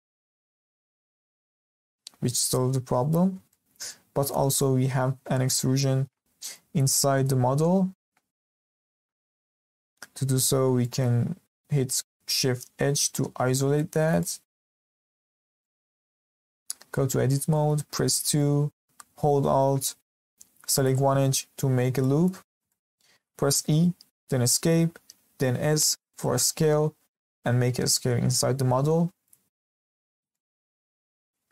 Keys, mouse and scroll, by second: 0.6-1.7 scroll down 2, 1.7 click, 3.0-3.5 scroll up 2, 3.5-4.5 shift+middle drag, 4.5 click, 8.9 Escape, 9.4-10.1 scroll down 2, 10.1 Tab, 10.8 shift+middle click, 11.1-12.7 scroll down 1, 12.7 shift+h, 13.5 scroll up 2, 13.7-14.9 middle drag, 14.9 scroll up 1, 15.2-15.5 shift+middle drag, 15.5 scroll down 1, 15.6-16.9 middle drag, 16.9 Tab, 17.3 middle click, 18.0 2, 18.3-20.7 scroll up 2, 20.7 alt+click, 21.4-22.0 scroll down 2, 22.0-22.4 shift+middle drag, 22.4 scroll up 1, 22.7 shift+middle click, 23.4 e, 25.5 s, 30.3-31.5 middle drag.